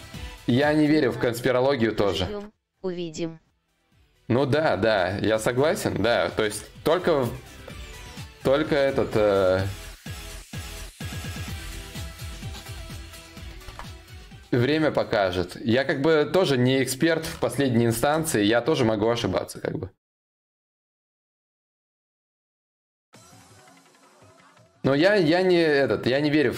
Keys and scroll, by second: 13.2 ctrl+c, 17.6 ctrl+shift+v.